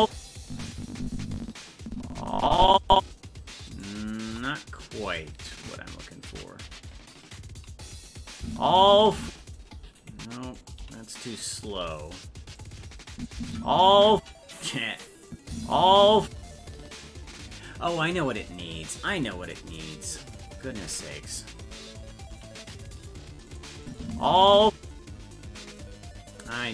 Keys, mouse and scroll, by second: 0.0 space, 0.4-2.9 drag, 3.7 right click, 4.2 c, 5.6 click, 6.3 s, 8.4 space, 9.2 space, 10.4 right click, 10.8 g, 11.4 right click, 11.8 g, 13.1 click, 13.3 space, 15.3 click, 15.5 space, 19.0 right click, 22.3 g, 23.8 click, 23.9 space.